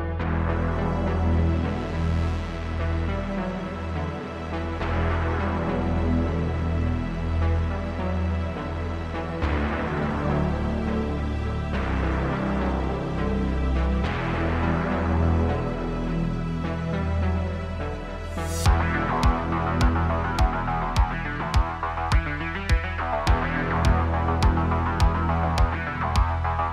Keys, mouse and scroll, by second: 1.4 a, 2.2 click, 2.5 g, 4.1 Tab, 4.3-5.6 drag, 5.6-6.2 middle drag, 6.2 click, 6.5-7.1 middle drag, 7.1 scroll down 1, 7.4 click, 8.3 Tab, 8.6 middle click, 9.4 click, 9.8 3, 9.9 click, 10.7 l, 10.9 middle click, 11.6 l, 11.7-12.7 middle drag, 12.7 l, 13.1 l, 13.4-14.7 middle drag, 14.7 l, 14.8-16.7 middle drag, 16.7 x, 17.4 middle click, 18.3 Tab, 19.7-20.2 drag, 20.7 click, 21.4-24.0 drag, 24.0 scroll up 2, 24.5-25.9 shift+middle drag, 26.1-26.7 middle drag.